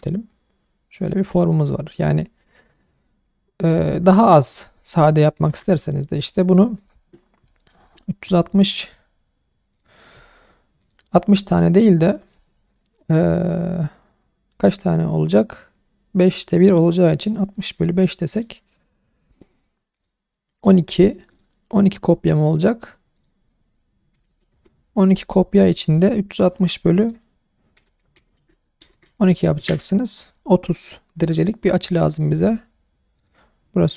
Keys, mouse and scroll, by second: 0.9 click, 1.3 shift+middle click, 3.6-3.9 scroll down 2, 3.9-4.4 scroll up 2, 5.5 Tab, 6.2 click, 6.8 click, 20.6 click, 21.3 click, 23.1-24.5 drag, 31.3 click, 31.9 click, 33.2-33.9 drag.